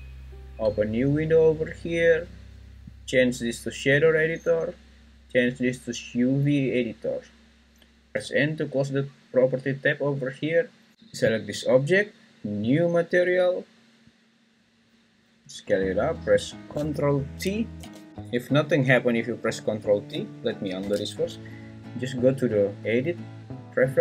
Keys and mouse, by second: 0.8-1.9 drag, 3.1-3.9 drag, 5.4-6.8 drag, 8.1 n, 11.3-12.7 drag, 17.8 ctrl+t, 20.8 ctrl+z, 22.6-24.0 drag.